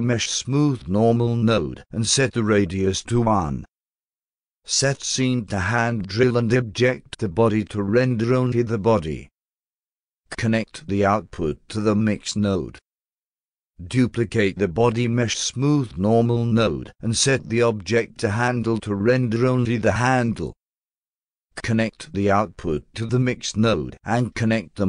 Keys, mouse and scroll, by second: 2.6 click, 3.6 1, 5.6 click, 6.5 click, 7.1 click, 8.6 click, 10.9 click, 12.5 click, 13.7 click, 13.8 click, 14.3-17.0 shift+drag, 19.0 click, 20.3 click, 22.5-23.5 drag, 23.9 click, 24.0 click.